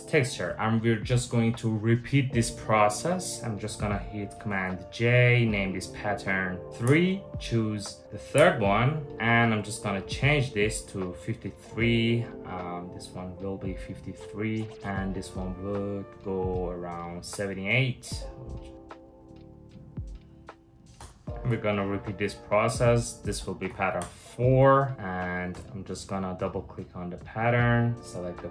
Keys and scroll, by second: 4.1 super+j, 6.7 Return, 6.7 3, 8.0 Return, 9.1 Return, 20.6 Return, 23.3 4, 23.6 Return, 25.1 Return.